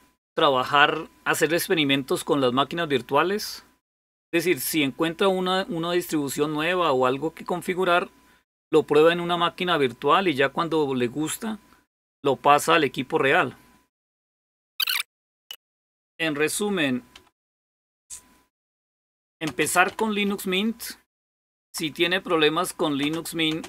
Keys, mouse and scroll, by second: 15.8 click, 17.0-21.4 typing, 22.9-23.3 typing.